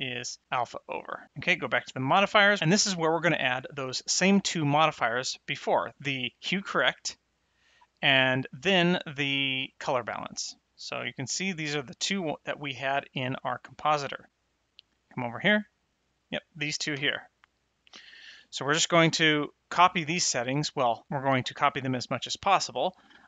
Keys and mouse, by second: 2.0 click, 4.4 click, 6.2 click, 8.4 click, 14.7 click, 15.9 middle click, 17.4 click.